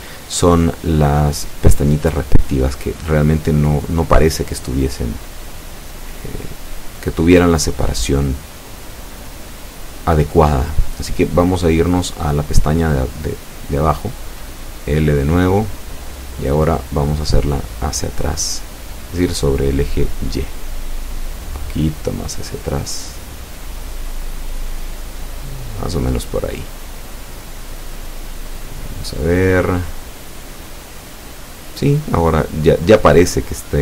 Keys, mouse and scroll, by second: 9.9 Escape, 10.4-10.7 scroll up 2, 11.4 right click, 11.9 right click, 13.0-13.4 scroll up 1, 13.9-15.0 middle drag, 15.0-15.4 scroll up 1, 15.9-17.3 shift+middle drag, 17.4 scroll down 1, 17.8-18.8 middle drag, 18.7 a, 19.9 z, 21.4 right click, 22.6 l, 23.9-25.1 middle drag, 25.5-25.9 scroll up 2, 26.5 scroll down 2, 27.1 z, 28.5-33.8 drag.